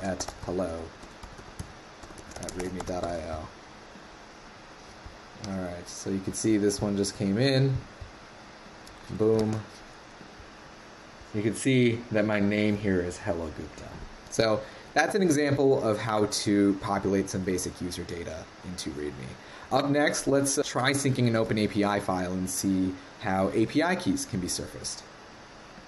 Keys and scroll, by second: 9.4 super+`.